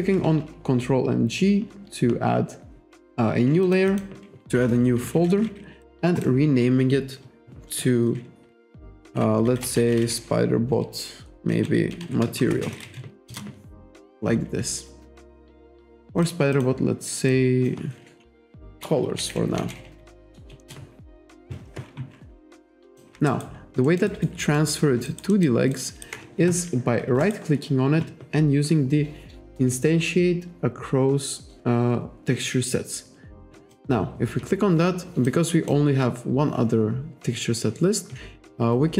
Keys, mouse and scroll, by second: 3.7 click, 5.9 click, 6.2 click, 9.3-13.3 typing, 13.3 Return, 16.1 click, 16.6 click, 17.4 click, 18.8-20.6 typing, 23.0 click, 23.4 alt+right click, 23.9 alt+middle click, 24.2 alt+right click, 24.5 alt+middle click, 25.1 alt+right click, 25.8 alt+right click, 27.3 right click, 33.8 click, 35.3 click.